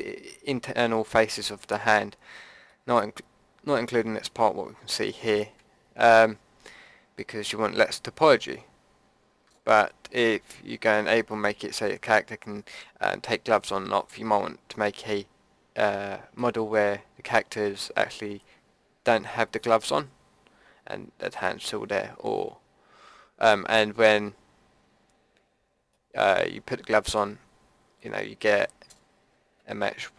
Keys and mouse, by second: 2.3 middle click, 23.5-25.9 middle drag, 28.7-29.8 middle drag.